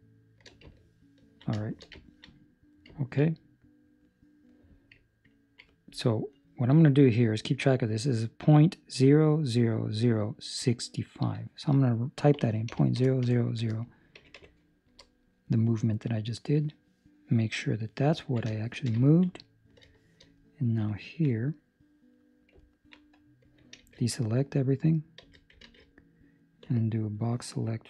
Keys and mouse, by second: 0.8 ctrl+middle click, 1.5 shift+middle click, 1.9 ctrl+middle click, 2.4 middle click, 2.9 ctrl+middle click, 3.2 middle click, 6.5 click, 11.1 click, 13.2 KP_0, 18.0 click, 18.1 ctrl+middle click, 18.4 shift+middle click, 18.9 ctrl+middle click, 19.4 middle click, 19.8 shift+middle click, 20.3 middle click, 20.8 ctrl+middle click, 21.2 middle click, 22.6 ctrl+middle click, 23.7 alt+a, 26.6 a, 26.6 b.